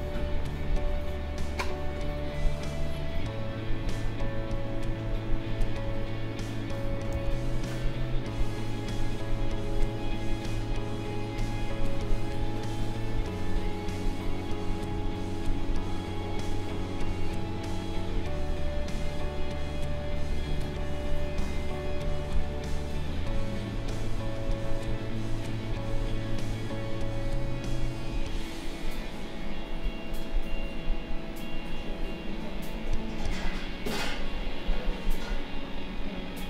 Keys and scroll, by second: 7.1 ctrl+z.